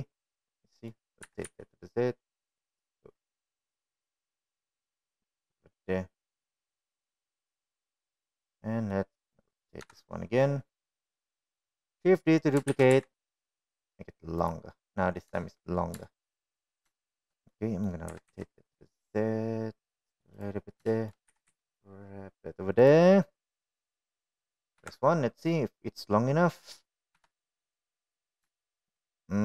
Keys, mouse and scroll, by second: 2.3 r, 6.4-8.7 middle drag, 9.0-9.5 scroll down 1, 9.5-10.1 middle drag, 11.0 KP_1, 12.1-12.6 drag, 13.9 shift+d, 17.2 shift+middle drag, 18.2 shift+middle drag, 18.7-19.0 middle drag, 19.3 r, 22.1 shift+middle click, 22.5 g, 25.3 click, 26.0 KP_1, 27.2-27.9 middle drag, 28.4 KP_1.